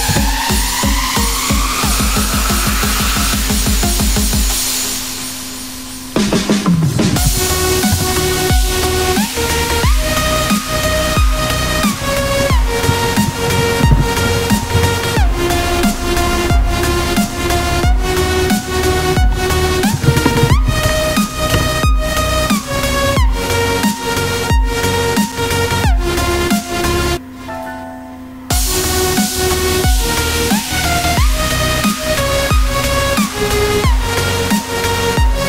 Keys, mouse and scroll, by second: 16.3 F1, 27.3 F1.